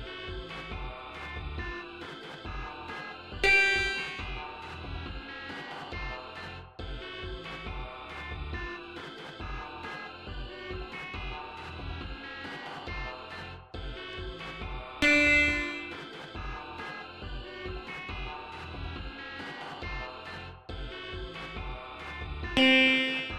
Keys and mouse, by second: 3.3 click, 7.2 click, 7.8 click, 8.5 click, 11.6 click, 14.8 click, 17.7 click, 18.8 click, 22.4 click.